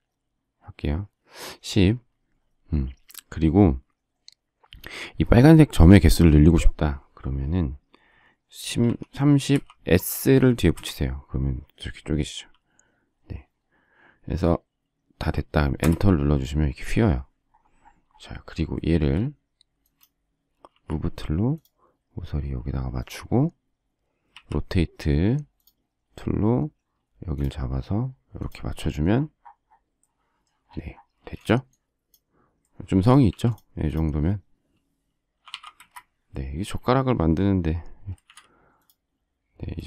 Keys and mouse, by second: 8.8-9.9 typing, 10.7 Return, 15.8 Return, 20.7 m, 31.1 space, 31.5 click, 31.7 click, 33.3 q, 34.5-36.0 typing, 38.2 shift+x.